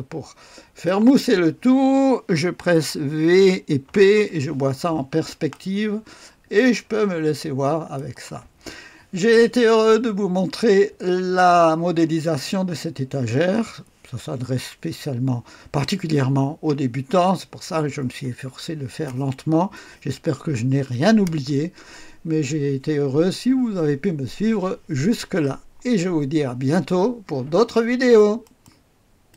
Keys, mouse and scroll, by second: 3.3-3.8 typing, 5.5-8.6 drag, 10.6-12.0 right drag, 28.4 middle click, 28.6 right click, 29.3 click.